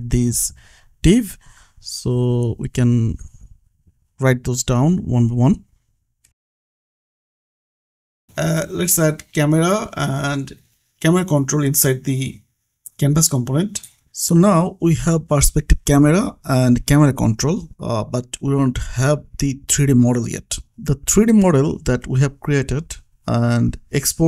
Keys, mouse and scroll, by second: 0.2-3.0 typing, 4.2 Return, 7.7 click, 11.1 ctrl+c, 11.4 click, 11.8 ctrl+v, 13.0 click, 14.9 click, 20.3 click, 22.8 scroll up 1, 23.3 scroll down 1.